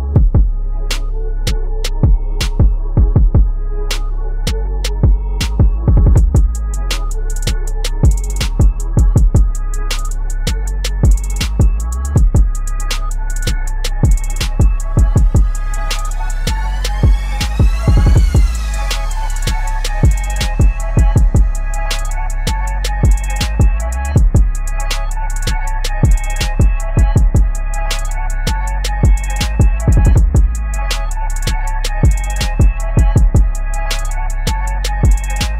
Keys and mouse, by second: 0.5 click, 1.5 space, 1.6 click, 1.7 space, 2.7-8.7 drag, 8.7 ctrl+z, 9.2-10.5 drag, 10.7 space, 10.8 click, 10.9 space, 12.1-15.3 drag, 15.5 right click, 15.9 click, 16.7 ctrl+-, 17.9 m, 18.2 right click, 18.9 click, 20.3 right click, 21.3 click, 23.3 ctrl+j, 24.9 v, 25.3-28.1 drag, 28.1 ctrl+a, 29.4 ctrl+d, 30.2 right click, 31.2 click, 32.3 ctrl+-, 33.9 ctrl+t, 34.9-35.5 alt+shift+drag.